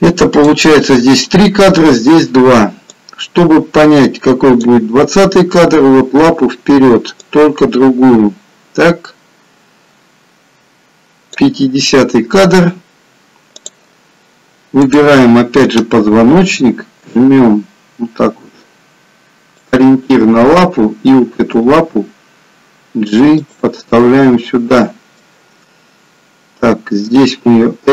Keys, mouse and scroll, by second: 3.1 click, 7.4 click, 13.6 click, 15.1 click, 17.2 g, 20.5 click, 21.6 g, 24.1 middle click, 27.6 middle click, 27.6 r.